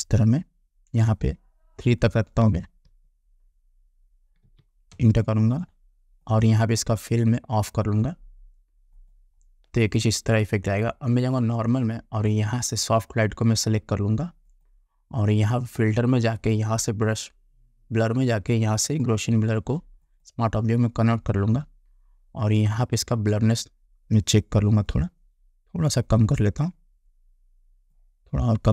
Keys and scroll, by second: 4.5 3, 5.0 Return.